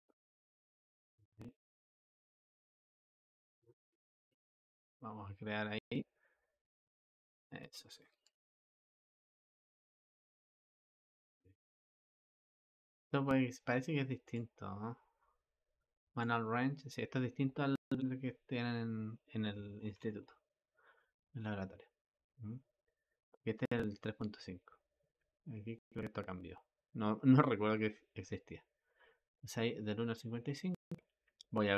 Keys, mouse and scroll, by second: 16.0-31.7 drag.